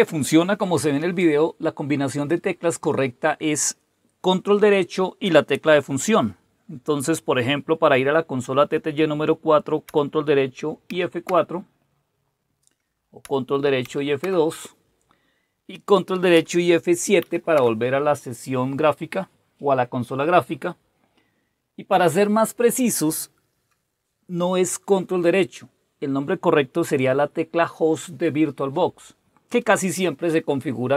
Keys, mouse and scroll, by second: 10.9 ctrl+F4, 13.8 ctrl+F2, 17.2 ctrl+F7.